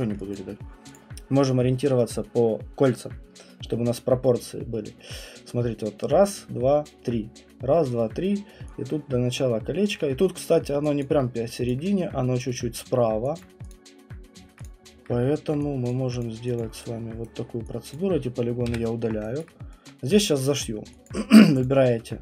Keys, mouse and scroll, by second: 0.0 alt+middle click, 0.3 alt+click, 0.5 alt+click, 0.5 alt+middle click, 0.5 click, 0.9 click, 9.9 alt+click, 11.0 alt+click, 11.7 click, 13.4 click, 13.7 click, 14.6 click, 15.9 click, 16.6 click, 17.2 right click, 17.9 click, 18.7 Delete, 19.4 alt+click, 20.4 right click, 20.6 middle click, 20.7 middle click, 21.1 alt+click, 21.6 click.